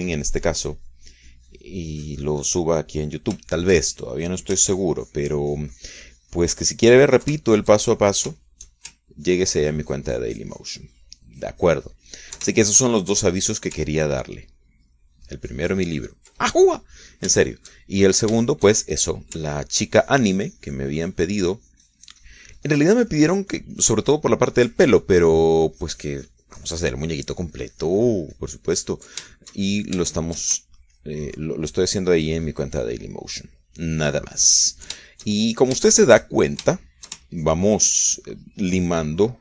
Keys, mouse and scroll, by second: 4.6 shift+middle click, 5.4-8.6 shift+drag, 8.8-10.1 ctrl+shift+middle drag, 10.5-13.8 ctrl+drag, 13.9-15.0 ctrl+shift+middle drag, 15.2-17.6 ctrl+drag, 18.2 middle click, 19.2 shift+middle click, 20.7-30.5 ctrl+drag, 30.6-31.8 ctrl+shift+middle drag, 32.0-36.3 ctrl+shift+drag, 36.4-37.7 ctrl+shift+middle drag, 38.1 shift+middle click, 38.6-39.4 ctrl+shift+drag.